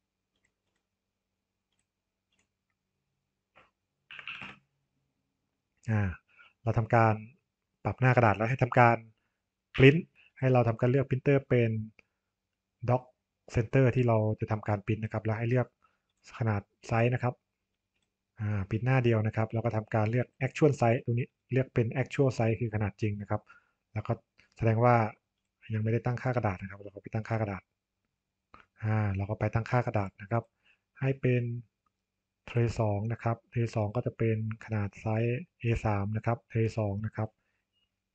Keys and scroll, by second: 4.4 Return, 9.7 ctrl+p.